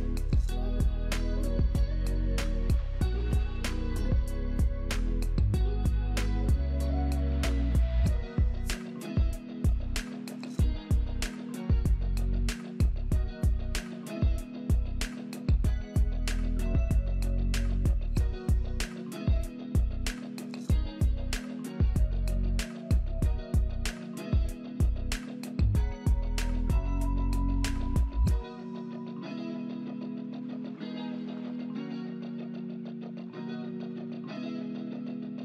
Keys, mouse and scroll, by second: 0.7 double click, 1.3-2.2 typing, 4.7 right click, 10.5 double click, 11.9-12.8 typing, 14.1 double click, 14.5-15.7 typing, 17.3 double click, 17.8-18.9 typing, 20.0-21.4 typing, 20.0 double click, 26.7 middle click.